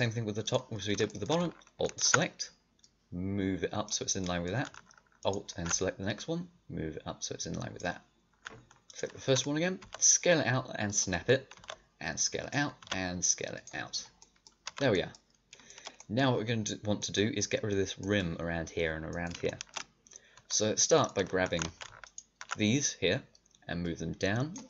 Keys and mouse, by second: 1.8-2.9 middle drag, 3.8-6.0 drag, 8.1-9.3 middle drag, 9.7 s, 11.5 s, 12.8 s, 14.0 click, 14.6 a, 15.1-16.1 drag, 21.6 a, 23.9 middle click, 24.1 middle click.